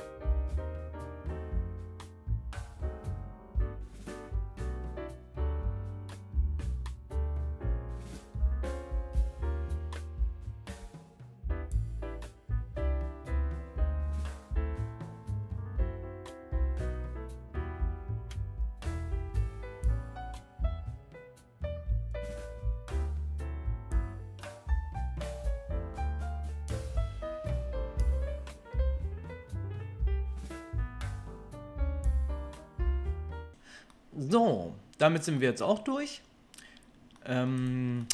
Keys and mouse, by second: 0.3 click, 0.3-22.5 middle drag, 0.7 Delete, 4.0 k, 6.5 click, 6.7 Delete, 10.5 Delete, 11.6 k, 14.3 Delete, 14.3 click, 15.5 click, 16.7 k, 22.5 click, 22.8 Delete, 22.8-31.5 middle drag, 23.1 click, 24.4 k, 28.1 Delete, 29.6 k, 31.5 click, 31.6 Delete, 31.6-37.5 middle drag, 37.5 click, 37.6-38.1 middle drag.